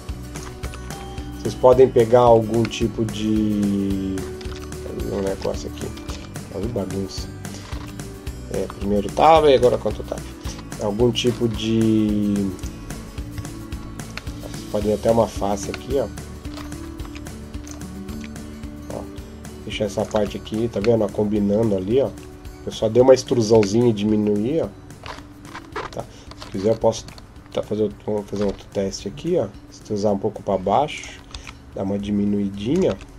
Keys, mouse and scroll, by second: 0.5 Tab, 0.7-1.3 scroll down 1, 2.1 Tab, 2.6 middle click, 4.3 Tab, 5.2 ctrl+Tab, 5.9 ctrl+Tab, 7.7 Tab, 8.5 Tab, 9.4 ctrl+Tab, 12.4 right click, 13.2 KP_Decimal, 14.2 middle click, 14.7 scroll up 1, 14.9-15.5 scroll down 2, 15.5 scroll down 2, 15.7 middle click, 16.8 e, 17.9 s, 20.0 Tab, 20.3-20.8 scroll down 2, 20.8 middle click, 21.9 Tab, 23.6 middle click, 26.8 e, 31.2 s, 32.7 Tab.